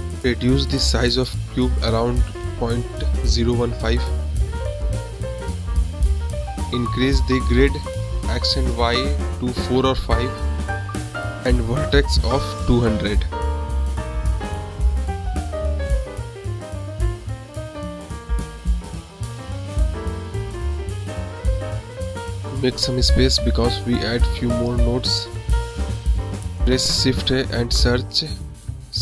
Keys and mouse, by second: 0.4-2.4 drag, 3.4 middle click, 4.6-6.9 drag, 8.9-9.9 drag, 9.9 KP_0, 11.1 click, 11.6-13.1 drag, 13.4 click, 14.3 click, 15.0-17.0 drag, 17.7 click, 22.1-23.4 drag, 23.6 click, 24.9 shift+a.